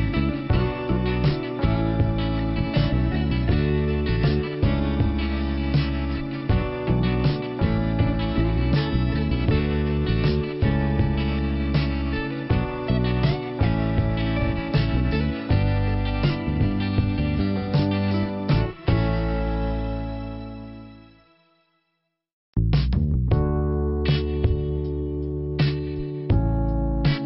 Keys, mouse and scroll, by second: 0.0 shift+Return, 1.7 middle click, 9.0 click, 9.1 click, 10.2 Delete, 11.8 click, 11.9 click, 13.8 click, 21.6 click, 23.7 click, 24.3 scroll down 2, 25.3 click, 25.6 click.